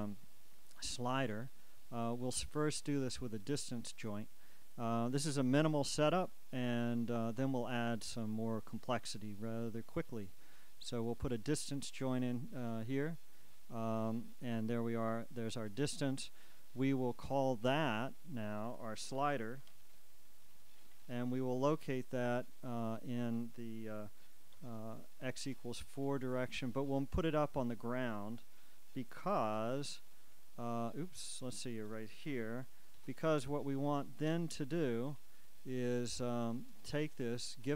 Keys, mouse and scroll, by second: 0.9-3.3 right drag, 11.0 click, 13.5 click, 18.2 shift+click, 19.7-21.0 typing, 21.2 Return, 22.9 shift+click, 24.7 4, 25.6 Return, 27.3 shift+click, 29.2 1, 29.5 Return, 31.4-32.4 shift+drag, 32.4 shift+0, 33.1 Return, 35.3 click, 36.6 right click.